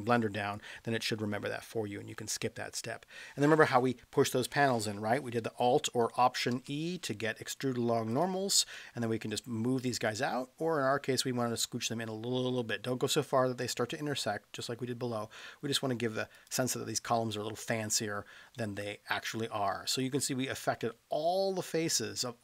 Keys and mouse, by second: 1.6-2.9 middle drag, 6.5 alt+e, 16.3 click, 18.5-22.4 middle drag.